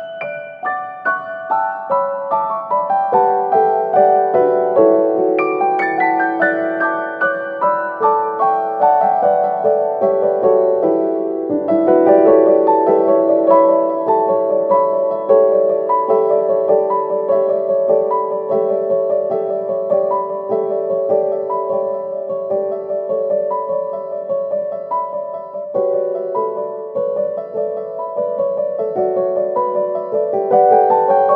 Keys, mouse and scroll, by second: 0.1-3.5 middle drag, 0.4-3.5 drag, 4.8-7.2 drag, 7.2-7.7 scroll down 2, 7.7-8.5 middle drag, 8.5 click, 10.0-12.1 drag, 12.1-12.9 scroll up 4, 12.9 scroll down 1, 14.0 click, 14.0 scroll down 1, 15.3 click, 19.5 scroll down 1, 19.7-20.7 middle drag, 20.7-22.4 scroll down 1, 22.4 click, 23.6-26.8 drag, 26.8-28.1 scroll down 3, 28.1 g.